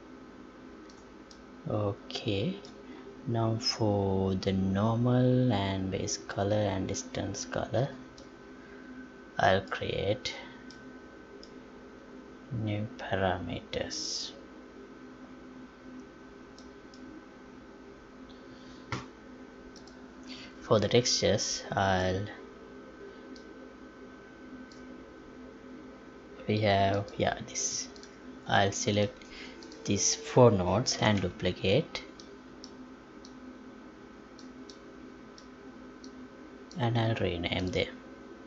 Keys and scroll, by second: 31.0 ctrl+w.